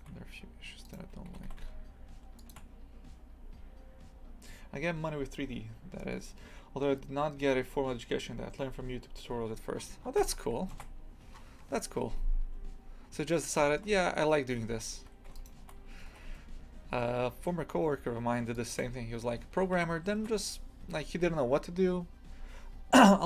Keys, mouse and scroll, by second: 0.9 right click, 1.3 g, 9.8 scroll down 1, 10.2 Tab, 11.3-11.9 scroll up 8, 11.9 scroll down 1, 13.0 scroll up 1, 13.6-14.0 shift+middle drag, 14.0 Tab, 14.6 2, 15.4 alt+shift+right click, 16.1 g, 18.8 Tab, 19.3 scroll down 2, 20.9 scroll down 5, 20.9 scroll up 2.